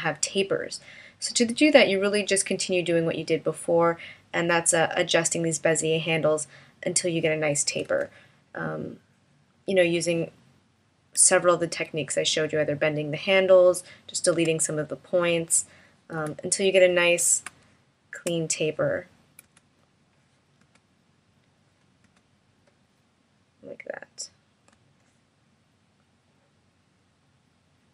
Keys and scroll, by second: 7.9 BackSpace, 16.2 BackSpace, 17.5 space, 19.5 BackSpace, 20.6 BackSpace, 22.1 BackSpace, 24.7 v.